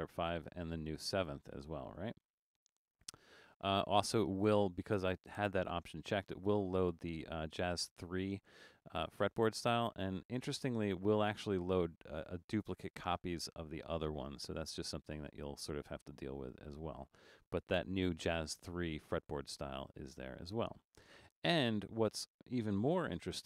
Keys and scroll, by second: 23.0 Return.